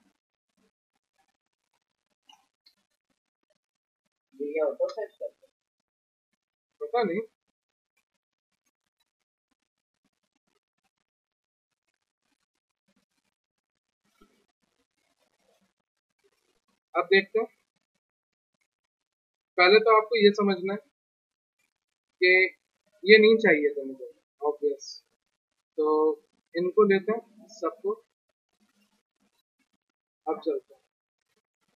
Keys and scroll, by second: 6.7 alt+Tab, 20.0 p, 28.6 alt+q, 29.3 f, 29.6 z.